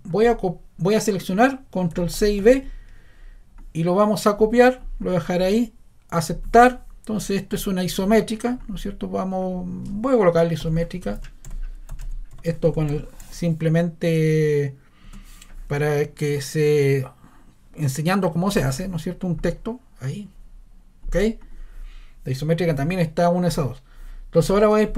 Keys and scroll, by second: 2.1 super+c, 2.4 super+v, 10.4-13.7 typing, 15.1 space.